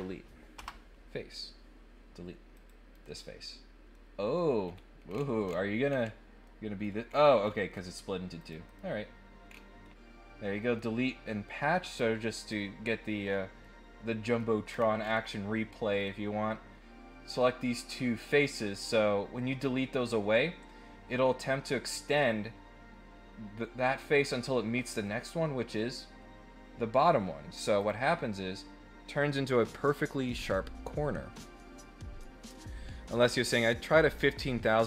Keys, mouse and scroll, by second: 2.5 click, 2.9 right click, 3.9 middle click, 4.6 scroll up 1, 5.1-6.0 scroll down 6, 6.4 middle click, 6.5 scroll up 2, 7.0-7.8 scroll up 7, 8.3 click, 8.6 right click, 9.5 scroll down 1, 9.8 middle click, 11.9 click, 12.4 click, 13.6 middle click, 14.7 scroll down 2, 14.9 scroll up 1, 15.9 scroll up 1, 25.0 middle click, 27.7 click.